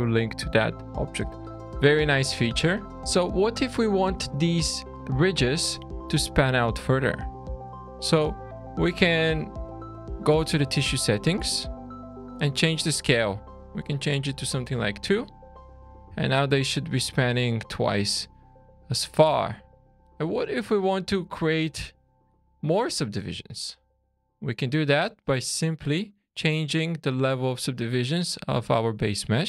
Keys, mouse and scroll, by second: 2.6 middle click, 3.0 scroll up 3, 7.8 click, 9.6 click, 10.7 click, 11.4-12.2 scroll down 7, 12.8 click, 15.3-15.7 scroll down 3, 16.1 shift+middle click, 20.1 scroll up 2, 20.5 shift+middle click, 22.9 scroll down 3, 23.3 middle click, 24.3 click, 26.0 click.